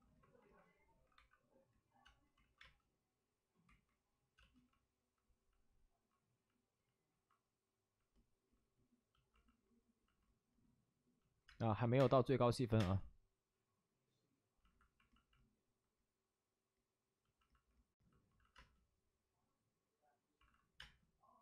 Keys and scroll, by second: 1.1 1, 2.0 space, 2.3 ctrl+z, 2.5 space, 3.6 ctrl+z, 4.3 space, 8.2 ctrl+z, 8.3 space, 11.4-12.7 typing, 18.3 alt+s, 18.5 space, 20.3 alt+s, 20.7 space.